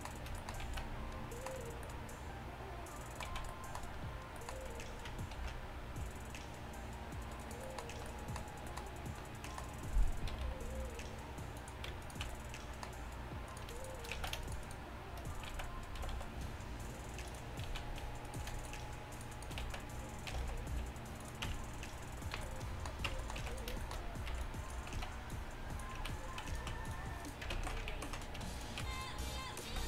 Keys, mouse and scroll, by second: 0.7 z, 3.3 z, 5.4 ctrl+r, 10.4 g, 12.1-14.2 right drag, 14.2 z, 15.6 z, 16.0 g, 17.7 z, 19.7 z, 20.4 g, 21.5 Tab, 22.4 a, 23.2 Tab, 23.4 z, 23.6 click, 24.4 b, 25.0 z, 25.4 click, 25.7 click, 26.0 z, 26.4-29.1 drag, 26.5-29.1 right drag, 27.7 ctrl+z, 28.0 ctrl+z, 29.7 z.